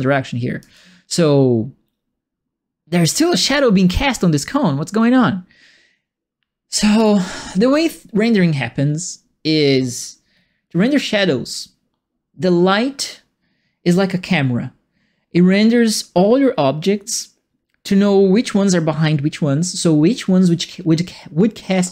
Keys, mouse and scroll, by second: 0.7-6.9 alt+drag.